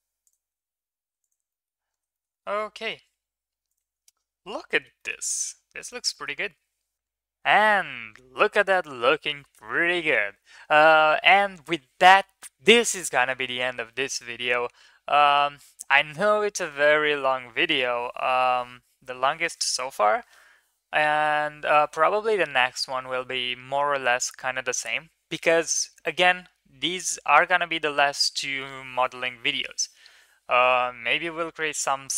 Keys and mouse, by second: 0.4 Tab, 1.0 ctrl+s, 1.2 click, 1.4 middle click, 2.1 shift+middle drag, 2.3 middle click, 2.5 Tab, 3.7 click, 4.1 ctrl+s, 4.7 shift+middle drag, 5.0 middle click, 5.4 ctrl+s, 5.9 middle click, 6.1 middle click, 7.0 click.